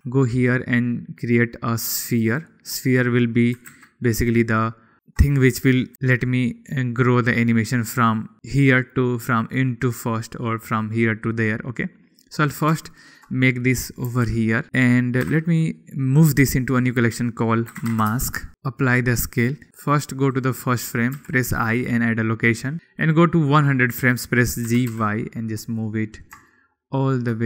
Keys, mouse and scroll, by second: 0.0 n, 0.0 shift+a, 0.9 shift+a, 4.8 g, 4.9 z, 5.1 click, 6.5 g, 6.8 y, 8.5 click, 13.7 click, 14.0-14.4 shift+middle drag, 14.6 g, 14.6 y, 16.4 m, 18.5 ctrl+a, 20.1 click, 20.9 click, 21.7 i, 23.7-24.3 drag, 25.2 g, 25.5 y, 26.8 click, 26.9 shift+middle click.